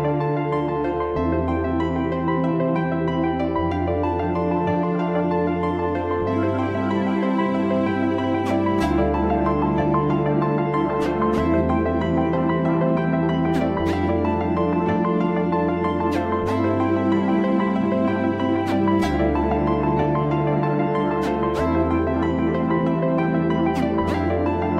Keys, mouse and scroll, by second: 4.0 middle click, 4.1-5.1 scroll down 1, 5.1 Tab, 5.6 click, 6.3 alt+z, 6.8-10.1 middle drag, 10.1-10.5 scroll down 5, 10.5-11.5 middle drag, 11.5-12.0 scroll up 3, 12.0-12.5 middle drag, 12.5-13.1 scroll up 1, 13.1 click, 13.7 alt+middle click, 14.6 Tab, 15.8-17.4 scroll up 3, 17.4-19.1 drag, 20.9 middle click, 21.1 scroll down 2, 21.4 Tab, 21.8-22.4 scroll down 9, 22.4 click, 22.7-23.2 scroll up 4, 23.2-24.7 middle drag.